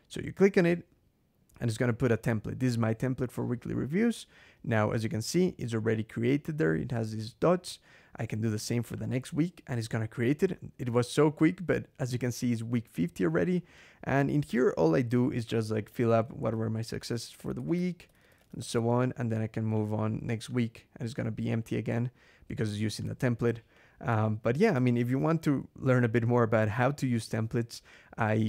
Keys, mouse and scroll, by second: 2.7 click, 3.5 click, 8.8 click, 10.8-12.6 drag, 13.4 click, 14.5 click, 14.9 Escape, 15.1-18.9 typing, 19.6 click, 20.3 click, 21.3 click, 22.8 click, 23.6 click, 23.8-25.5 typing, 25.9 Escape.